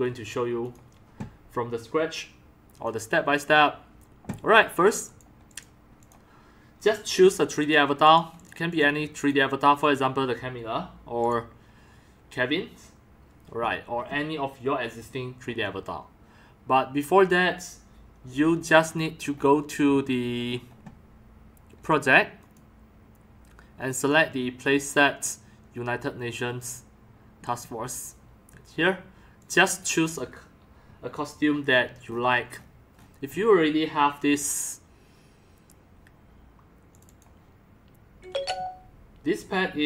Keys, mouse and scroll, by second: 2.5 click, 5.1-5.4 drag, 6.0 click, 8.3 click, 9.9 click, 11.2 click, 18.7 middle click, 18.7 scroll down 1, 22.4 click, 23.9 click, 29.5-29.9 drag, 32.0 middle click, 32.0 scroll up 1.